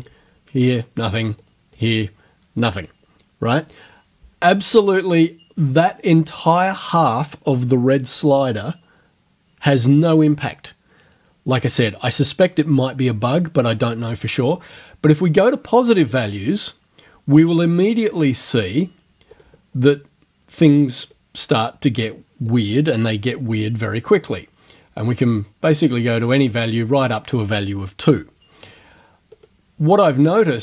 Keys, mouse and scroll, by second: 0.0 click, 1.4 click, 16.1 click, 18.1 click, 19.3 click, 21.1 click, 22.5 click, 24.3 click, 25.1 click, 26.0 click, 26.5 click, 29.4 click.